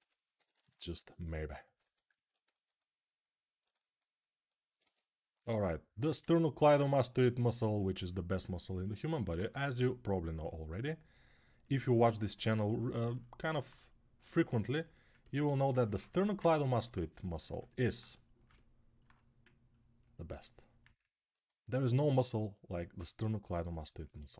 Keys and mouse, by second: 0.1 ], 0.3 ], 0.4 ], 4.6 2, 9.5 g, 13.3-15.4 alt+right drag, 15.9 1.